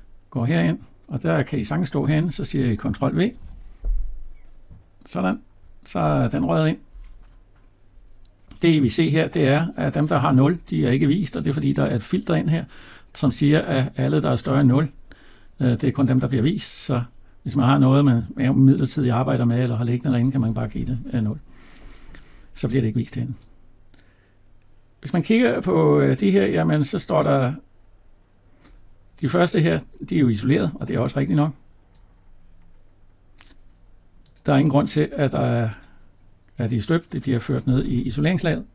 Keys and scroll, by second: 3.2 ctrl+v.